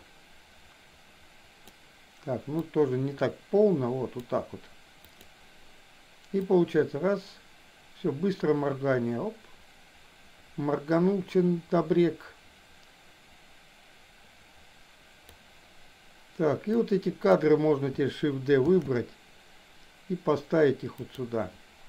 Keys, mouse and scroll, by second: 2.7-4.3 drag, 5.0 click, 6.5-15.4 drag, 16.7 click, 18.7 shift+d.